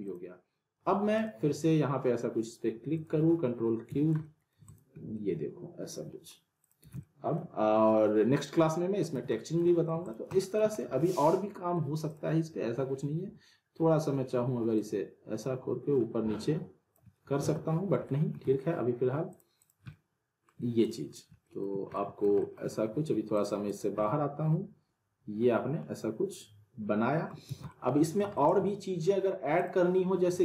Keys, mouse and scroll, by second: 0.0 click, 3.9 z, 4.2 alt+middle click, 4.7 click, 5.0 scroll up 1, 5.1-6.4 alt+middle drag, 6.6 click, 6.8 z, 7.0-7.6 middle drag, 8.4-9.0 click, 9.1 z, 9.4 scroll down 1, 9.6 alt+middle click, 10.0 click, 10.3 alt+middle click, 10.7 scroll up 1, 10.9-11.9 alt+middle click, 12.1 click, 13.3 r, 14.8-16.9 drag, 17.4 ctrl+z, 18.1 alt+middle click, 18.4 w, 19.3 click, 19.9-20.5 alt+middle click, 20.8 click, 21.1 scroll down 2, 21.4 middle click, 22.4 alt+middle click, 23.3 click, 24.3-27.4 alt+middle drag, 27.5 z, 28.0 alt+middle click, 29.6 click.